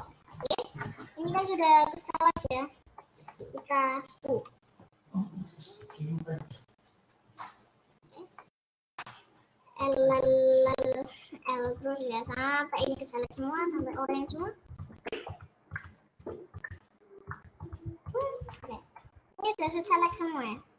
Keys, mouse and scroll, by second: 0.4-4.1 middle drag, 4.1 scroll up 3, 4.8-5.3 scroll up 7, 5.5-5.9 scroll down 7, 5.9 shift+middle click, 6.7-7.3 scroll up 4, 7.9 scroll down 5, 8.3-9.9 middle drag, 9.9-16.4 typing, 17.5 l, 18.2 l, 18.7 middle click, 18.8 scroll down 1, 19.1-20.7 middle drag.